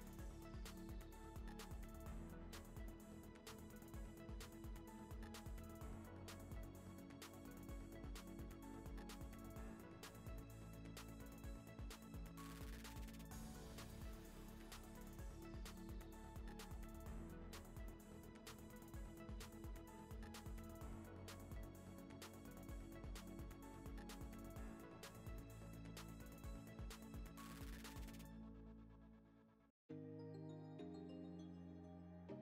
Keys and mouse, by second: 0.5 Tab, 0.7 middle click, 1.2 click, 1.9 click, 2.9 click, 3.0 ctrl+s, 3.1-4.5 middle drag, 4.5 shift+middle click, 4.8 middle click, 5.7 middle click, 6.6 ctrl+s, 6.9 click, 7.8 ctrl+p, 8.2 click, 8.4 z, 8.6 ctrl+s, 8.7 click, 9.1 click, 9.4 click, 9.6 click, 13.1 click, 13.5 Tab, 13.6 3, 14.5 middle click, 14.8 shift+click, 15.2 middle click, 16.1 click, 17.4 click, 17.8 Tab, 18.2 click, 19.0 click, 20.9 click, 23.3 click, 24.3 click, 25.0 click, 25.6 click, 25.9 click, 26.6 click, 27.2 click, 28.1 click, 28.7 click, 29.2 click, 29.6 middle click, 30.3 click, 30.8 click, 31.1 click, 31.5 click, 32.2 click.